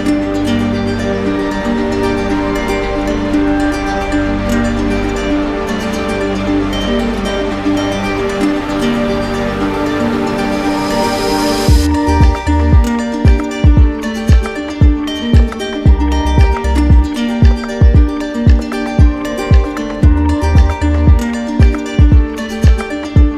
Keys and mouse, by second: 2.2 click, 2.6-3.7 right drag, 6.2 z, 9.2-10.3 drag, 11.4-12.5 drag, 15.3 z, 16.2 click, 18.0-19.0 drag.